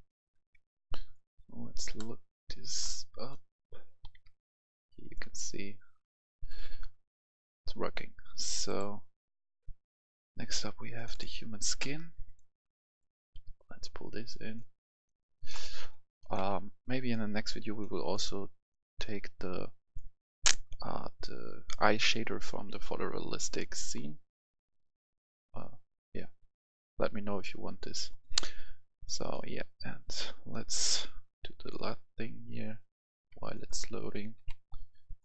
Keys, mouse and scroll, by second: 0.2 click, 0.2 F10, 0.9 click, 1.9 right click, 2.9 scroll up 1, 3.2-6.0 right drag, 3.5 w, 4.0 w, 8.6-14.9 drag, 16.3 Delete, 17.0 click, 34.4 Delete.